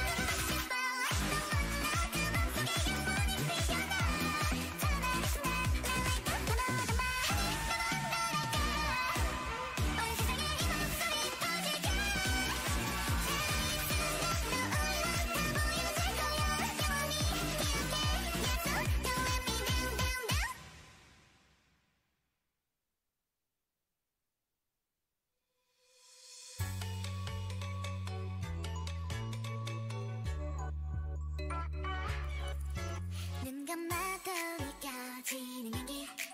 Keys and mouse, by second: 1.1 n, 1.7 n, 2.0 t, 2.6-5.2 drag, 11.9-13.8 drag, 16.2 middle click, 16.6 Tab, 17.8 s, 21.7 Tab, 25.0 click, 33.6 Tab, 34.7 a, 35.5 Tab, 35.8 click.